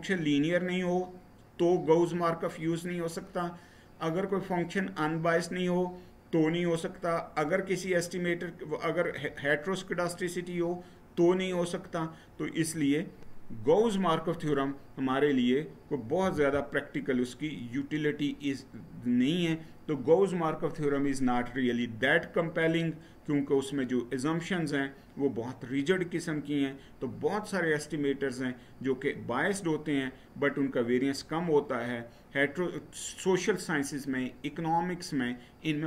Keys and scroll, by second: 16.1 Right.